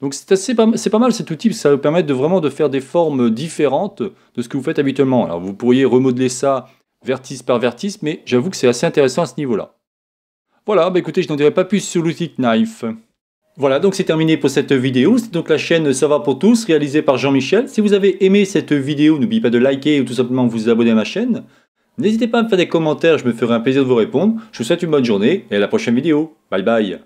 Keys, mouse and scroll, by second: 0.1-1.1 middle drag, 3.0 middle click, 9.0-10.5 middle drag, 10.6 middle click.